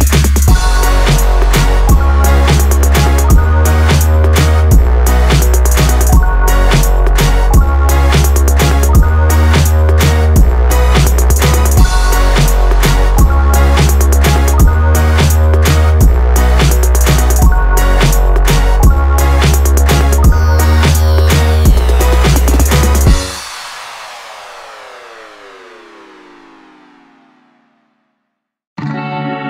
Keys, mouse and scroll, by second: 0.4 click, 0.9-1.7 scroll down 1, 1.7-4.7 drag, 5.1 ctrl+z, 5.7 click, 6.6 click, 7.3 shift+d, 11.8 click, 12.6 shift+d, 16.7 click, 19.3-23.1 drag, 24.1 click, 25.6 click, 27.3 shift+click, 27.9-29.4 drag.